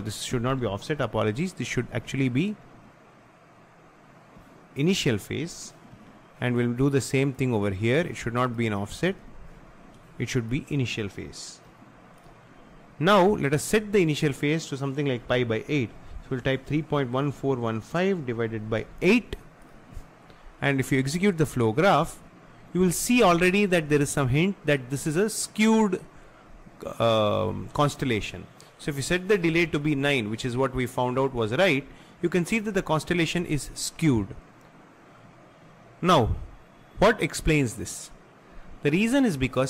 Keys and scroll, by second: 2.7 ctrl+x, 4.4 0, 5.9 ctrl+v, 9.1 ctrl+x, 9.9 0, 11.7 ctrl+v, 15.4-18.9 typing.